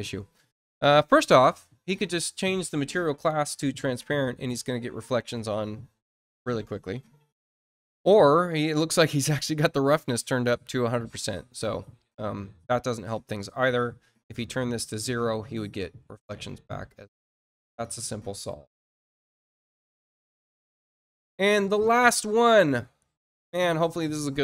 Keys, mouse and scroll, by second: 16.8 click, 18.4 click, 21.0 click.